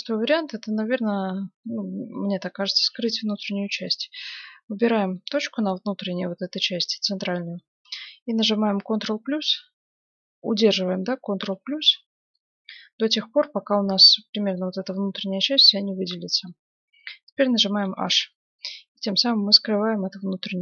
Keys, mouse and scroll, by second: 0.6 z, 2.7 ctrl+Tab, 3.7-6.7 right drag, 6.7 middle click, 8.0 ctrl+KP_Add, 14.1-17.2 middle drag, 17.8 h, 19.0-20.6 middle drag.